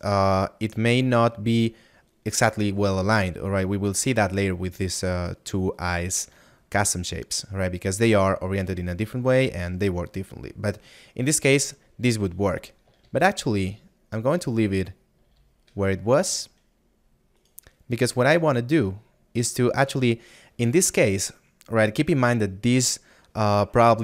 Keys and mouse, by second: 0.7 middle click, 7.1 shift+middle click, 17.4 right click, 18.7 middle click.